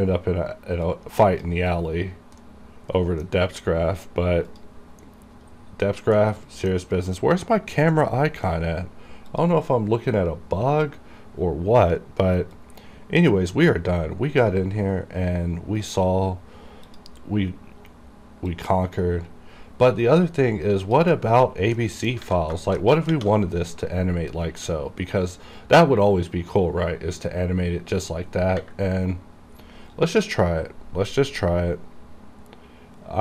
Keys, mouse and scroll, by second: 0.9 click, 1.0 click, 2.0-2.5 scroll up 1, 2.5 middle click, 3.4-4.6 scroll down 2, 4.6 click, 5.3-6.0 scroll up 1, 6.3-9.1 middle drag, 9.4 click, 12.1-12.7 scroll down 1, 12.7-14.7 drag, 14.7 shift+right click, 17.0 click, 21.1 click, 21.9 middle click, 22.4 a, 22.7 shift+middle click, 23.2 shift+_, 26.8-27.2 scroll down 1, 29.0 scroll up 1, 29.3 scroll down 1.